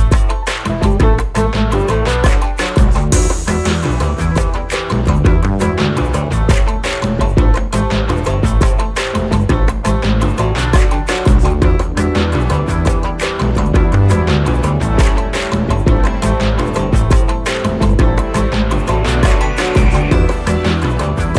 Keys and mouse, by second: 0.5 ctrl+z, 2.3-3.1 click, 4.5-7.8 alt+drag, 10.1-11.1 drag, 12.8-13.5 drag, 17.6-19.9 alt+drag, 20.8 Down.